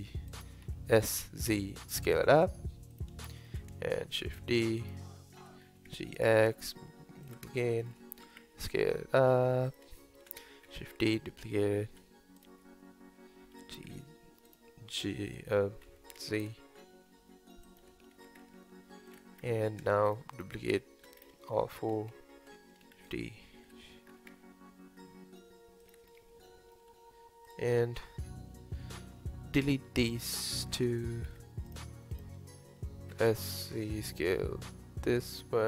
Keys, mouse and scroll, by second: 0.7 s, 3.3-4.2 shift+middle drag, 4.2 shift+d, 5.4 g, 7.7 shift+middle click, 8.2 s, 10.0-10.7 shift+middle drag, 10.7 shift+d, 11.9 f, 12.4-13.5 right drag, 13.5 g, 15.9 s, 17.8 g, 19.4-20.1 scroll down 1, 20.1 shift+click, 20.3 shift+click, 20.7 shift+click, 21.2 scroll down 2, 21.5-22.9 shift+middle drag, 22.9 shift+d, 23.6 g, 26.1-26.5 scroll up 2, 26.5-27.5 shift+middle drag, 27.5 click, 30.3 shift+click, 31.3 x, 32.1 click, 33.2 s.